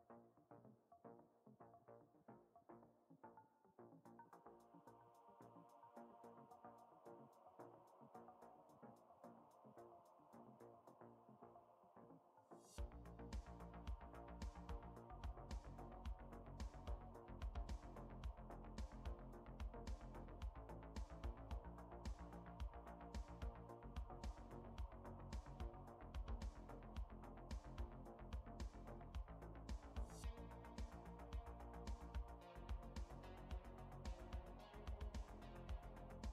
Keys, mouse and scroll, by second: 27.9 click, 30.7 click, 35.6 Right, 36.0 Right.